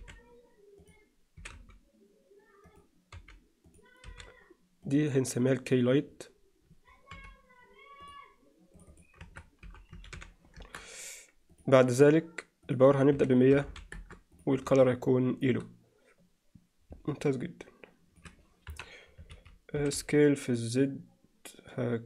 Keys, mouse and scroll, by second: 0.0 r, 1.4 s, 3.2 g, 4.1 r, 7.1 m, 8.8-10.9 drag, 11.6 drag, 12.7-14.2 drag, 13.7 0, 14.3 drag, 17.1-18.2 middle drag, 18.7 KP_1, 19.3 z, 19.8 s.